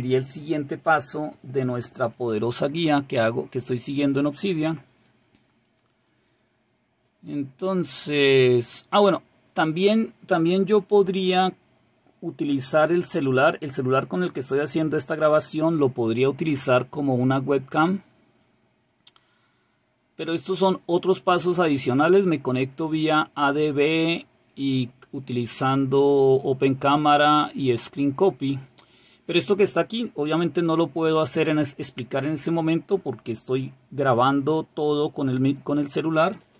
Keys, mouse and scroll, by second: 5.6 click, 7.1-10.5 scroll down 2, 18.1 scroll down 2, 19.1-20.5 scroll down 2, 25.1-27.1 scroll down 2, 27.1-28.7 scroll down 1.